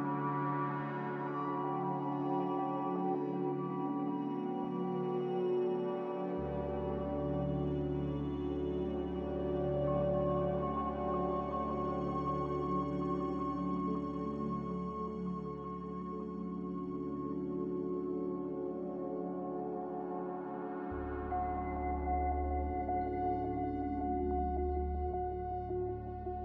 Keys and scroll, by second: 3.2 a, 13.3 f, 17.1 n, 22.4 a, 24.0 b, 25.1 Delete, 25.6 n.